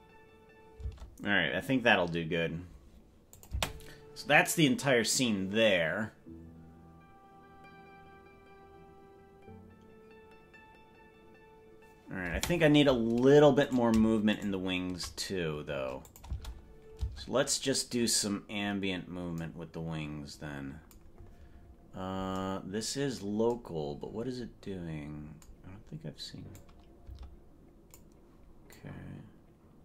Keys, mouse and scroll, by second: 0.9 space, 3.4-8.6 drag, 3.7 space, 12.5 space, 14.1 right click, 14.7 shift+right click, 16.1 click, 16.3 space, 17.1 space, 26.6-28.0 drag, 28.7-29.8 drag.